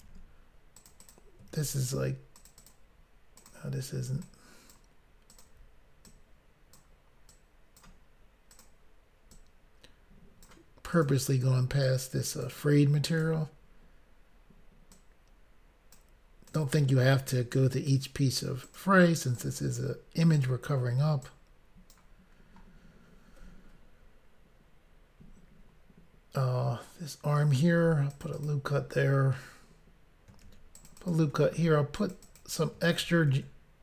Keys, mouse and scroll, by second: 0.0 ctrl+r, 0.7 click, 1.0 click, 1.1 double click, 1.5 ctrl+r, 2.3 double click, 2.5 double click, 2.7 double click, 3.3 double click, 3.5 double click, 4.2 click, 5.3 click, 5.4 click, 6.1 click, 7.3 click, 8.5 click, 8.6 click, 9.3 click, 10.9 click, 11.1 click, 11.8 click, 13.1 click, 14.9 click, 16.5 click, 16.6 click, 17.4 click, 18.6 click, 18.8 click, 19.4 click, 20.3 click, 20.5 click, 21.7 click, 21.9 click, 27.7 ctrl+r, 28.1 click, 28.5 double click, 30.4 ctrl+r, 30.8 click, 31.0 click, 31.5 ctrl+r, 32.0 double click, 32.2 double click, 32.4 double click, 33.0 ctrl+r.